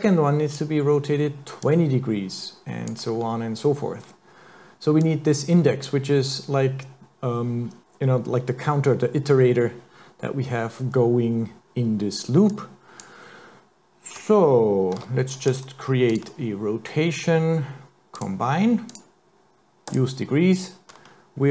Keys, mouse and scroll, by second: 0.0 click, 1.6 click, 5.0 click, 12.5 click, 15.0 shift+a, 19.9 click.